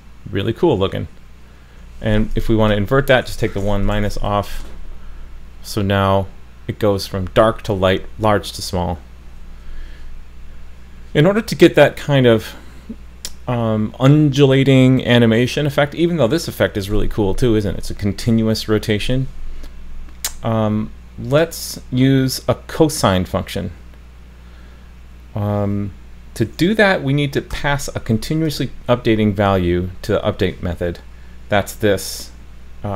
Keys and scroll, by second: 3.9 super+s.